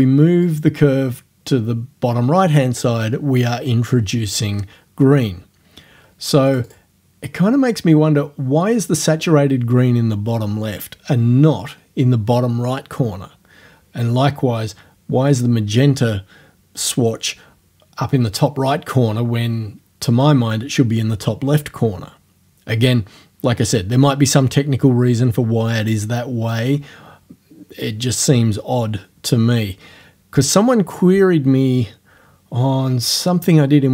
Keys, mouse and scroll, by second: 0.5-3.0 drag, 6.5 click.